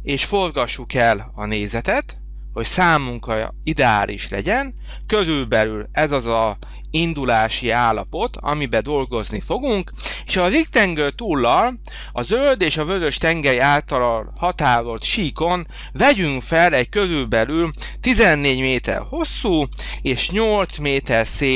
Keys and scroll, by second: 1.4 h, 17.7 1, 18.1 4, 20.0 8.